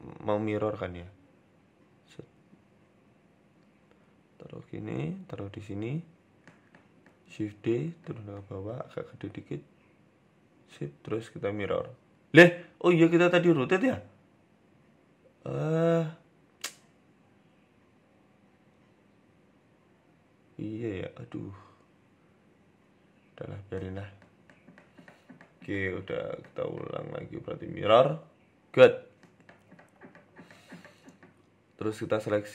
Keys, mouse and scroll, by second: 0.1 Tab, 0.6 a, 0.9 g, 6.3 shift+middle click, 7.3 shift+d, 8.7 s, 10.7 Tab, 11.1 click, 14.2 ctrl+z, 15.7 click, 16.6 click, 18.0 Tab, 19.1 a, 19.5 r, 23.2 Tab, 24.4-24.7 scroll down 2, 24.7-25.2 scroll up 1, 25.2-25.9 scroll down 1, 26.5 scroll down 1, 26.5 click, 27.0 click, 28.0-28.3 scroll up 1, 28.3-29.0 scroll down 2, 29.0-30.0 scroll down 1, 30.5 click, 31.6 shift+right click.